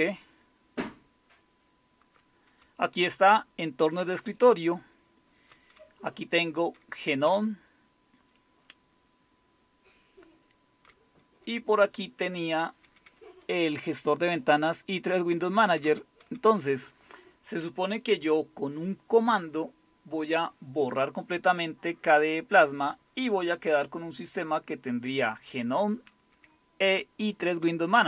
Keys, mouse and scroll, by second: 0.0-3.7 typing, 4.1 Down, 4.6-5.4 Down, 5.8-10.8 Up, 7.3-9.0 Down, 9.1-10.8 Down, 11.4-12.2 Up, 12.8 Up, 13.1 Up, 14.2 Up, 15.4 Down, 15.7 Down, 15.8 Down, 16.2 Home, 16.5 Up, 27.6 End.